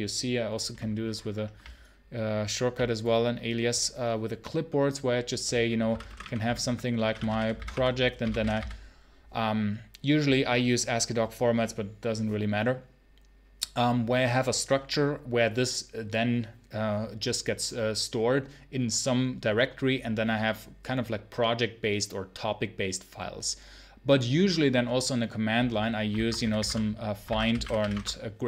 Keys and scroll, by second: 5.7-8.9 typing, 6.5 Tab, 26.0 ctrl+c, 26.2-27.9 typing.